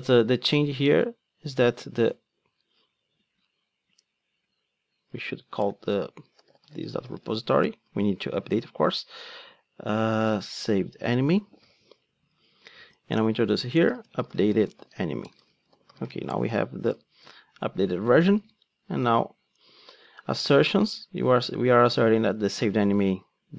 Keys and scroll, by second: 5.1 Tab, 7.6 Return, 12.4 alt+Return, 18.4 super+c, 19.6 super+v.